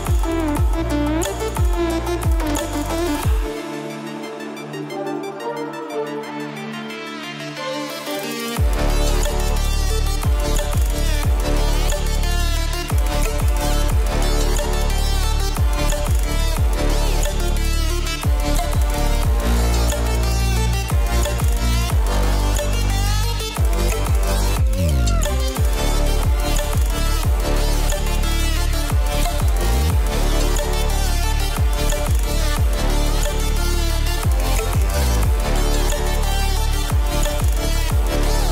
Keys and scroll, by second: 35.6 ctrl+d.